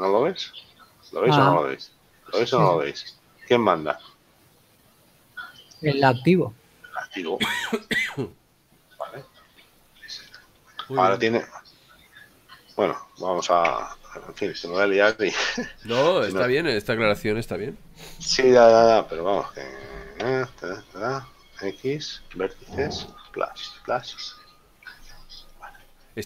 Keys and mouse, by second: 5.7 right click, 13.8 Tab, 20.4 l, 25.8 right click.